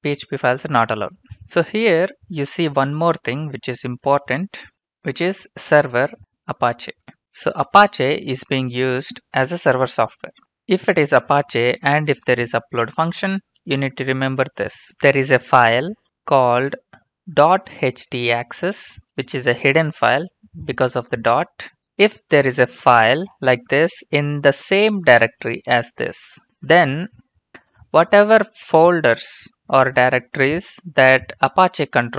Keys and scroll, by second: 15.1 Return, 15.3 Return, 17.2-19.6 typing, 25.6 ctrl+c, 26.4 ctrl+v.